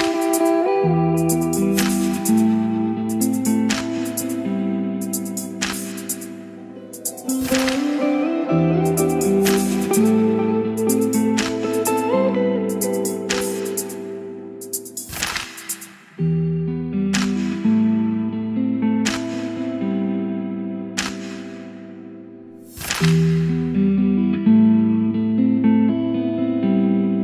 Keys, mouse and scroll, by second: 0.0-2.4 typing, 2.7 ctrl+e, 4.4 click, 5.3 ctrl+r, 7.5-26.7 drag, 26.7-27.2 middle drag.